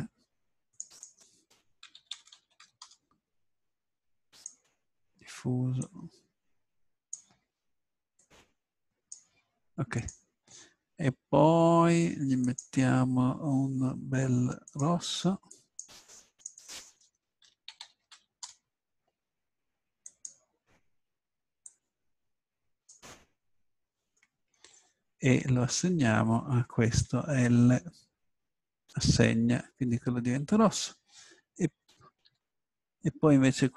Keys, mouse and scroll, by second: 2.3 r, 3.5 middle click, 4.3-5.6 drag, 5.7 click, 12.4-14.4 drag, 14.7-19.6 drag, 18.0 s, 20.0-21.4 drag, 27.0 l, 32.3 a.